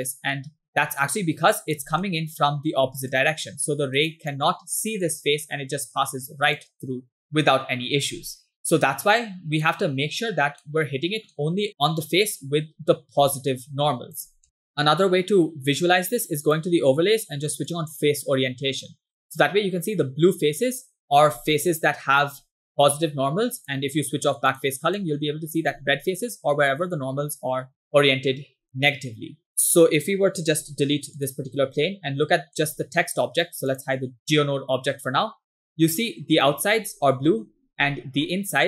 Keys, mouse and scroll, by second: 1.0 ctrl+click, 2.1 middle click, 3.2 click, 5.1 click, 6.6 click, 7.3 ctrl+z, 7.5 click, 8.5-9.7 ctrl+drag, 10.4 scroll down 1, 10.7 middle click, 11.9 click, 13.6 ctrl+click, 14.4 click, 14.7 click, 16.5-18.2 drag, 19.3-21.0 middle drag, 21.7 middle click, 23.7-24.8 drag, 25.0 middle click, 29.5 middle click, 29.9-30.6 scroll down 1, 30.7 x, 31.9 shift+middle click, 33.8 click, 34.2-36.5 middle drag, 37.3 middle click, 37.5-38.1 scroll up 4, 38.3-38.6 middle drag.